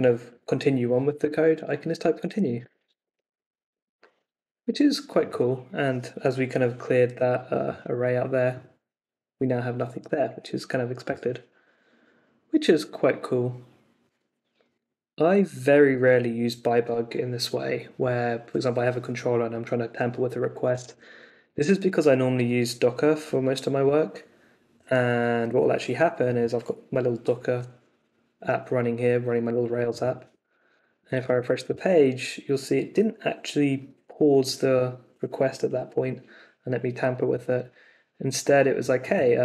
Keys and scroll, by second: 1.9-3.8 typing, 31.2 super+r.